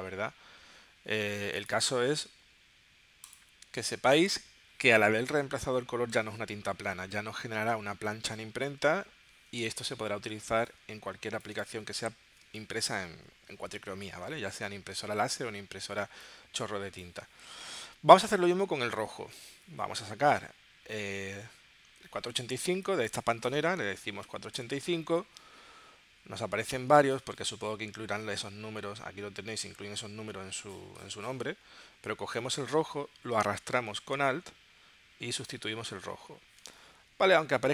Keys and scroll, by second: 10.5 space, 12.4 space, 23.8-25.1 typing.